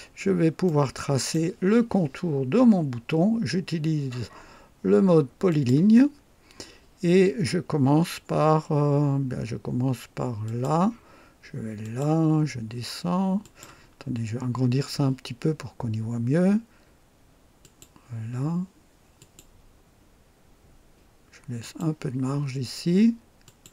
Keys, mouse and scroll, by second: 0.1-0.4 scroll up 1, 0.6 right click, 1.4 right click, 5.5 click, 6.1 scroll up 1, 10.4 click, 11.8 click, 13.4 click, 14.0-14.6 scroll up 2, 17.6 click, 19.2 click, 21.6 click, 23.4 click.